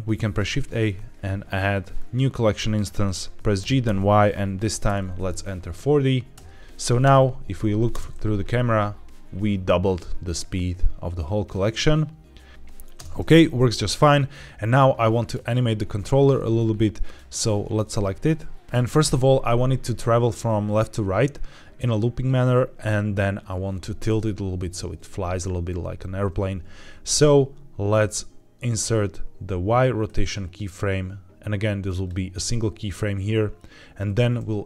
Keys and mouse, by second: 0.1 shift+a, 3.5 g, 3.7 y, 4.8 KP_4, 4.9 KP_0, 6.2 KP_Enter, 6.6 KP_2, 6.9 KP_0, 7.8 space, 12.8 space, 14.2-15.2 drag, 29.9-32.0 right drag.